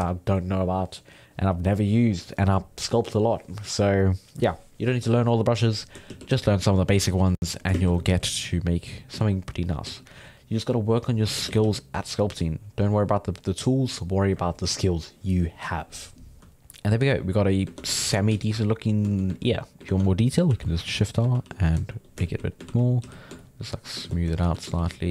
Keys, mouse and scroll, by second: 6.1-8.0 typing, 8.5 click, 9.1 ctrl+z, 9.5 click, 9.8 f, 10.2-11.4 drag, 11.4 shift+c, 11.6 f, 11.9-16.3 drag, 16.4 alt+middle click, 17.0 ctrl+middle click, 17.7 ctrl+Tab, 18.0 alt+a, 18.1-19.6 ctrl+middle drag, 19.6 right click, 19.8 ctrl+Tab, 20.4 shift+r, 21.3 ctrl+r, 21.8 shift+middle click, 22.2 shift+r, 22.7 ctrl+r, 23.0 f, 23.4 shift+click, 24.0 ctrl+z, 24.4 shift+s, 24.7 shift+f.